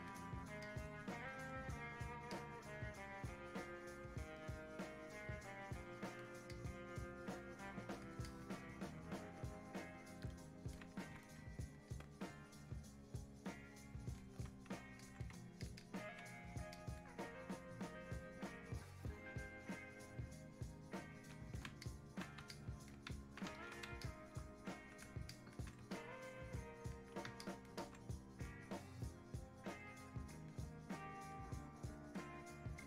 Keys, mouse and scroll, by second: 0.7-2.3 drag, 2.3-11.9 drag, 11.9-15.0 ctrl+drag, 20.1 click, 20.2-21.9 drag, 21.9 alt+click, 22.6-24.0 ctrl+drag, 24.0 alt+click, 26.0-29.9 ctrl+drag, 29.9-32.8 drag.